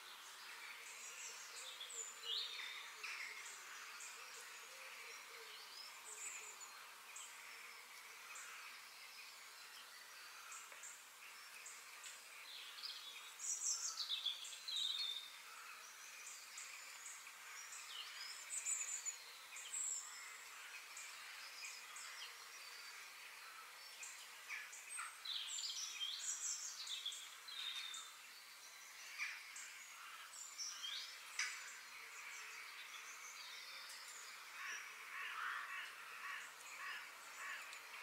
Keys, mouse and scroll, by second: 0.9 ctrl+z, 2.0 f, 3.6 click, 4.3 f, 5.7 click, 6.0 shift+click, 6.8 KP_3, 7.6 shift+d, 9.7 shift+d, 14.1 shift+d, 16.7 shift+d, 19.8-20.2 scroll down 2, 20.2-21.2 middle drag, 21.2-21.7 scroll up 3, 22.3-24.5 shift+middle drag, 24.5 scroll down 2, 24.8 middle click, 25.4-26.9 scroll up 3, 30.4 shift+click, 30.7 shift+click, 31.4 shift+click, 31.8 shift+click, 32.3 shift+click, 32.7 shift+click, 33.4 shift+click, 33.8 shift+click, 34.9 ctrl+j, 35.8-37.6 middle drag, 37.6 click.